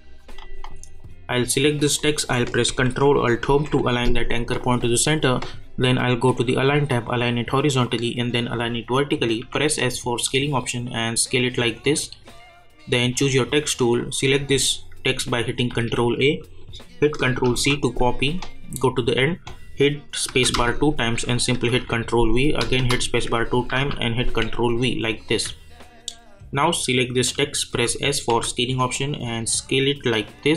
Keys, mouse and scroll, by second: 1.0 click, 3.5 ctrl+alt+Home, 5.8 click, 9.4 s, 10.8-14.0 drag, 13.3 click, 15.7 ctrl+a, 17.4 ctrl+c, 18.6 click, 20.2 space, 21.7 ctrl+v, 22.6 space, 23.7 ctrl+v, 24.6-25.1 alt+scroll down 2, 25.1-25.5 alt+scroll up 2, 25.9 click, 27.7 s, 28.3 s, 29.2-30.5 drag.